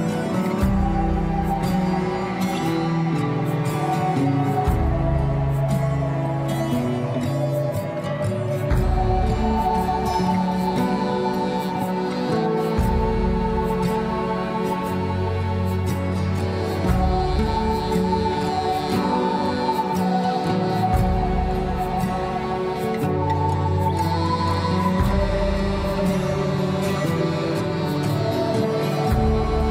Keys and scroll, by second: 9.0 F4.